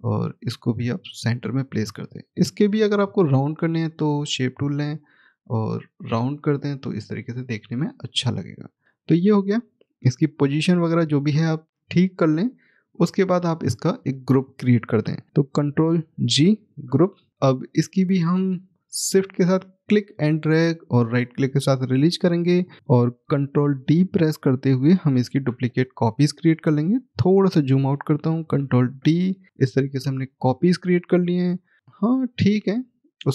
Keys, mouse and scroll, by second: 11.7 scroll down 1, 12.8 click, 14.2-15.1 scroll up 1, 15.1-16.1 scroll, 18.5 click, 20.7 shift+right click, 22.2 scroll down 1, 23.0-24.5 scroll, 25.9 middle click, 26.0-26.5 scroll down 1, 27.1 middle click, 27.9 ctrl+d, 30.0 click, 31.3-31.8 scroll up 1, 31.8 middle click, 33.2 click.